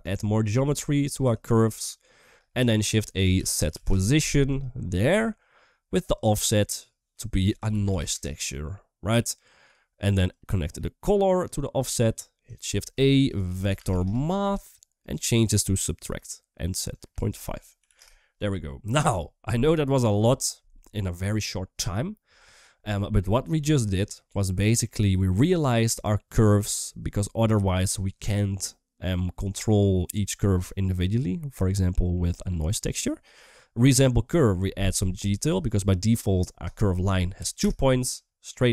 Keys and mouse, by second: 0.0 shift+middle click, 0.7 click, 1.4 shift+middle click, 2.6 shift+a, 5.9 drag, 6.1-9.5 drag, 10.1-11.3 drag, 12.6 shift+a, 15.2-16.0 drag, 16.7-17.8 drag, 19.9-20.6 middle drag, 20.6 click, 20.8 click, 22.2 middle click, 24.3 middle click, 25.3 middle click, 26.4 middle click, 27.1-29.8 middle drag, 31.5 middle click, 33.3 middle click, 35.2-37.5 drag.